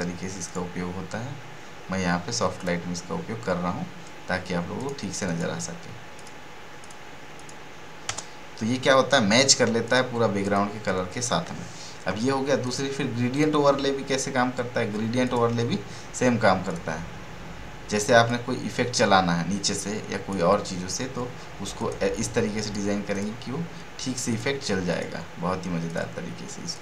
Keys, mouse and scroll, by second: 0.4 click, 4.7 click, 9.8 click, 12.6-21.7 drag.